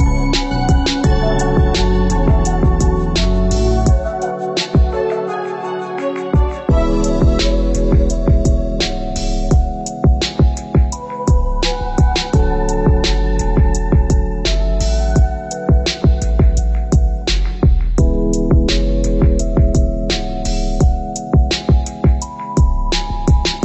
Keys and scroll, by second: 14.9 ctrl+=.